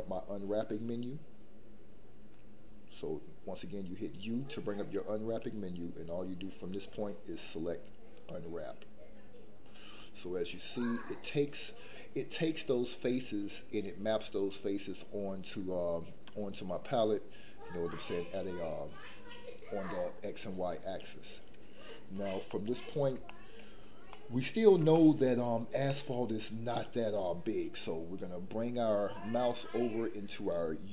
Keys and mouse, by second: 22.6 middle click, 23.4 shift+middle click, 24.1 middle click, 24.9 shift+middle click, 25.9 middle click.